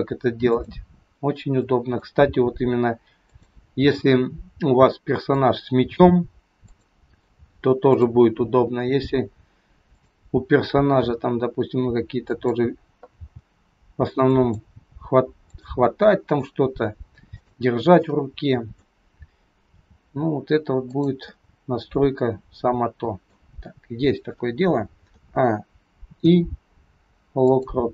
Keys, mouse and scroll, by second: 0.5 click, 1.6 middle click, 2.2 r, 3.7 scroll down 2, 4.0 middle click, 6.7 click, 7.2 r, 9.8 click, 11.0 r, 13.1 g, 15.8 middle click, 17.3 click, 18.1 middle click, 19.7 r, 21.2 middle click, 23.5-24.3 scroll down 2, 25.1 a, 26.1 i.